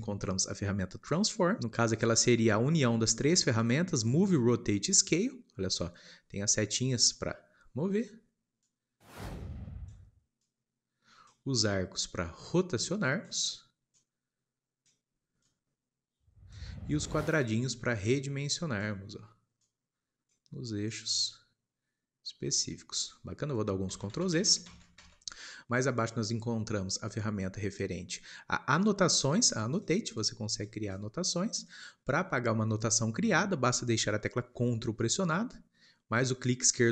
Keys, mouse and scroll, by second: 1.2-5.5 drag, 5.5 scroll up 2, 7.1 click, 8.7 click, 17.2-18.1 scroll down 1, 18.1 click, 19.6 click, 21.0 click, 23.8 ctrl+z, 24.0 ctrl+z, 24.2 ctrl+z, 26.0 shift+middle click, 30.1-36.9 drag.